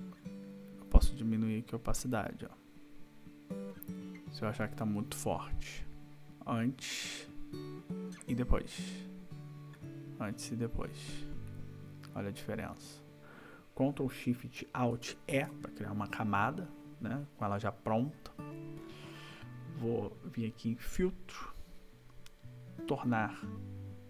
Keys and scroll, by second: 14.9 ctrl+alt+shift+e.